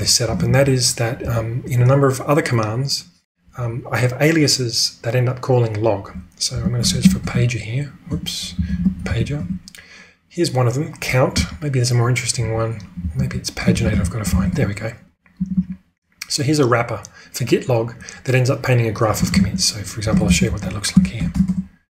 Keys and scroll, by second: 0.2-1.1 typing, 6.2-10.0 typing, 11.0-15.5 typing, 19.3 ctrl+space, 20.0 ctrl+space, 20.2-21.8 typing.